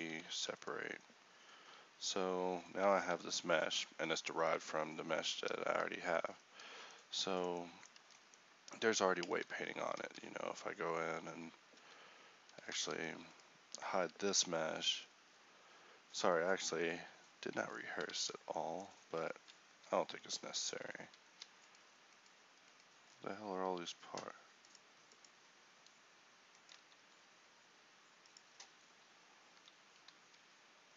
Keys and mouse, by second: 0.3 Tab, 5.4 ctrl+c, 8.1 Tab, 9.4 Tab, 10.1 ctrl+t, 12.8 ctrl+t, 14.4 h, 18.2 ctrl+t, 20.8 alt+h, 21.4 a, 26.9 1, 29.6 a.